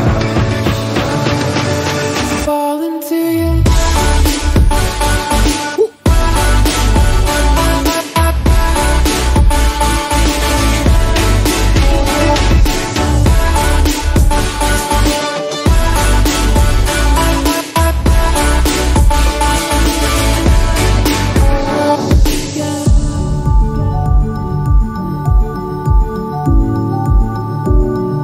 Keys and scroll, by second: 1.9 ctrl+t, 14.0 ctrl+o, 26.2 ctrl+t.